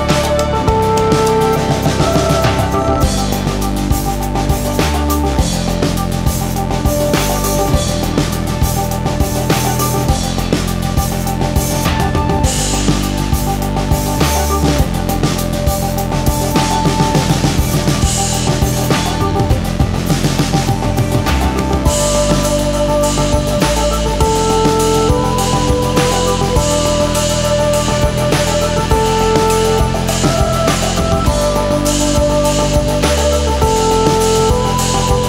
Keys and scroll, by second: 6.1 ctrl+z.